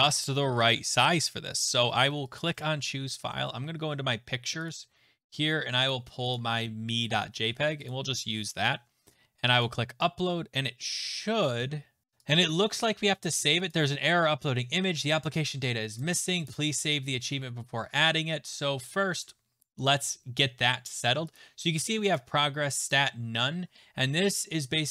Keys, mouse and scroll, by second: 0.8 scroll, 2.4 click, 4.7 click, 6.3 click, 7.9 click, 9.6 click, 12.0 click, 13.3 click, 13.7 click, 16.0 click, 16.5 click, 21.4 click, 22.1 click, 22.9 click.